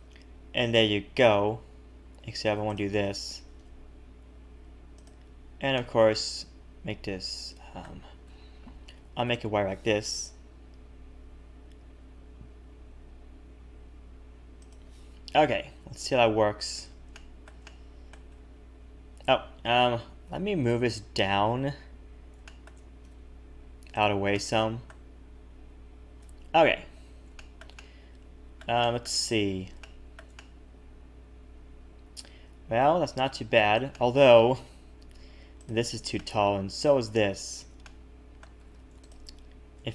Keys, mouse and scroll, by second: 2.1 a, 2.3 a, 2.6 alt+shift+click, 3.4 g, 5.7 middle click, 8.2 KP_7, 8.9 s, 15.5 a, 15.8 a, 16.0 a, 16.2 a, 16.4-17.1 scroll down 8, 17.1 shift+middle click, 17.6 middle click, 18.3 Tab, 18.8-19.3 scroll up 3, 19.3 Tab, 20.3 alt+h, 20.6-21.5 scroll down 2, 21.5-21.8 scroll down 1, 21.5 KP_1, 22.1-22.4 scroll down 2, 22.4 shift+middle click, 23.0 g, 24.3 middle click, 26.2 h, 26.6 Tab, 26.9-27.3 scroll up 2, 27.4 shift+middle click, 27.7 middle click, 28.8 shift+middle click, 29.3-29.8 scroll up 6, 29.8 shift+middle click, 30.3 middle click, 33.9 shift+middle click, 34.4 Tab, 34.6-35.0 scroll up 3, 35.6 click, 36.1 middle click, 37.4 shift+click, 38.0 middle click, 38.6 a, 38.7 a, 39.0 alt+shift+click.